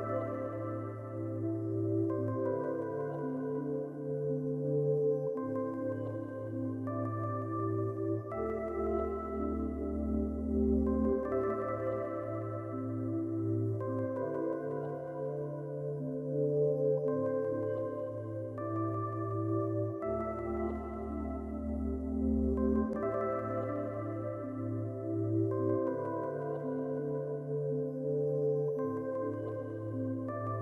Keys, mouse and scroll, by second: 2.9-3.7 shift+scroll down 5, 4.7-8.5 shift+scroll down 1, 8.5 s, 9.0-9.5 shift+scroll down 4, 10.1-11.9 shift+scroll up 1, 17.5-18.6 shift+scroll down 1, 22.3-22.6 shift+scroll down 1, 23.2-23.9 shift+scroll up 1, 23.9-24.7 ctrl+scroll down 2, 24.8-25.4 shift+scroll up 2.